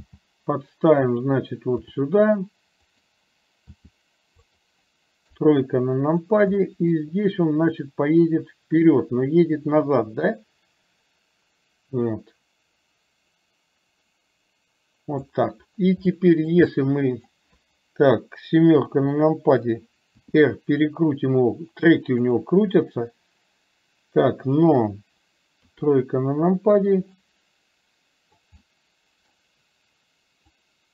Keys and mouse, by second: 2.0 r, 3.8 r, 5.4 KP_3, 6.7 shift+middle drag, 8.0-15.3 drag, 16.2-16.6 shift+middle drag, 16.7-17.3 middle drag, 18.9 KP_7, 20.2 r, 25.9 KP_3, 27.3-28.7 middle drag, 29.0 middle click.